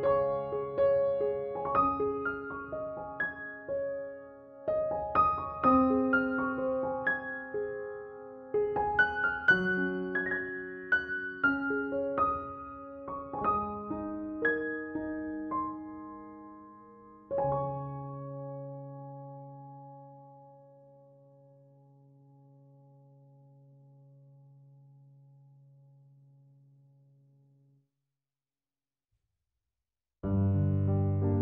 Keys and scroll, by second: 21.6 space, 22.7 typing, 25.4 BackSpace.